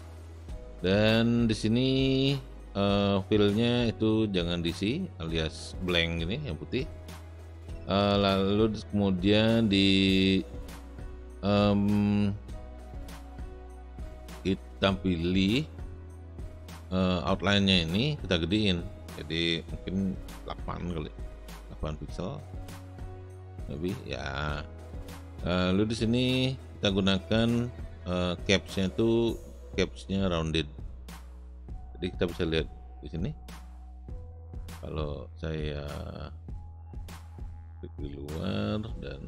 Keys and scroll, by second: 20.9 KP_8.